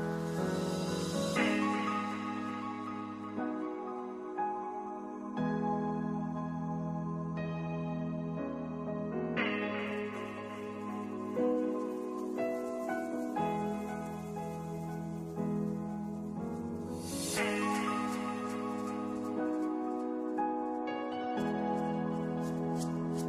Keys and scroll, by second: 1.6-2.4 typing, 6.4-7.3 typing, 9.6 2, 10.3 1, 12.5 2, 16.1 space.